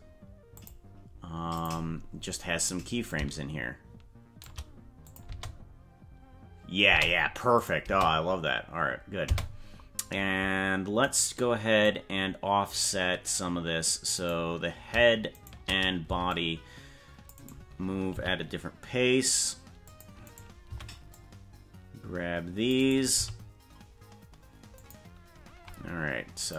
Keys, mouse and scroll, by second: 0.5-1.7 drag, 3.1-4.5 shift+drag, 5.0 click, 5.3 space, 6.9 space, 7.6 click, 7.8 space, 9.2 space, 11.8 click, 14.1 right click, 15.3 shift+right click, 16.0 c, 18.2 g, 20.3 right click, 20.7 c, 23.2 g, 26.5 click.